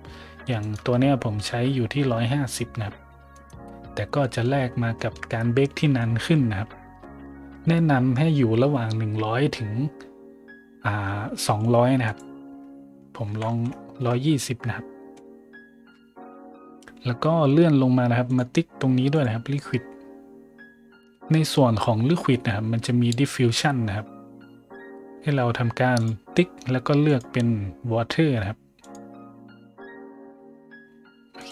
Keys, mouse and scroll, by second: 0.5 right click, 3.3 right click, 4.1 middle drag, 4.6 shift+middle click, 4.9 shift+middle drag, 5.2 middle click, 5.4 middle click, 5.6 middle click, 5.9 shift+middle drag, 12.0 click, 13.2 KP_1, 13.4 KP_2, 13.5 KP_0, 13.9 KP_Enter, 17.0-17.5 scroll up 2, 18.2 click, 18.2 right click, 19.1 click, 19.1 right click, 19.7 middle click, 20.7 middle click, 21.7 middle click, 25.9 click, 27.0 click, 28.7 click, 31.3 click.